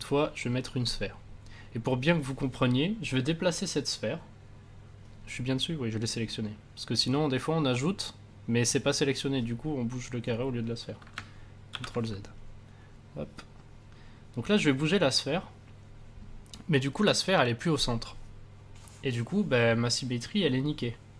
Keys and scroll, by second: 11.7 ctrl+z.